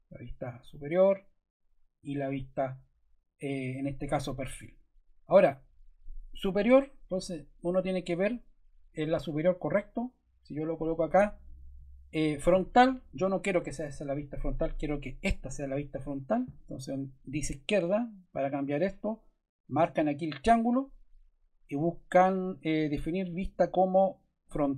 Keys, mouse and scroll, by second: 6.5 click, 6.6 click, 11.4 click, 12.3 click, 16.2 click, 16.4 click, 20.6 click.